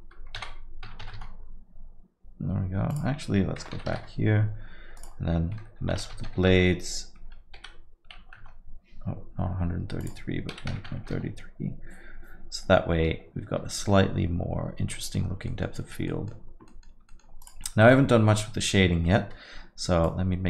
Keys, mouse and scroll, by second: 2.9 click, 5.0 click, 8.2 KP_3, 10.0 click, 11.0 KP_3, 14.9 middle click, 15.2 scroll down 1, 15.5 middle click, 15.9-16.2 scroll down 2, 16.1 middle click, 16.7 middle click, 17.1 alt+middle click, 17.1 alt+middle click, 17.4 click, 17.7 middle click, 20.0 click.